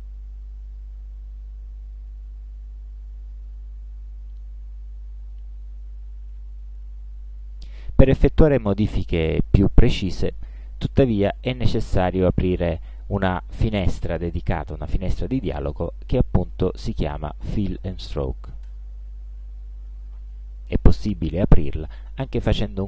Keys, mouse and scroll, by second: 0.0 ctrl+scroll up 2, 0.7-1.0 ctrl+scroll down 2, 3.1 Escape, 4.4-5.6 middle drag, 18.7 click, 21.9 click.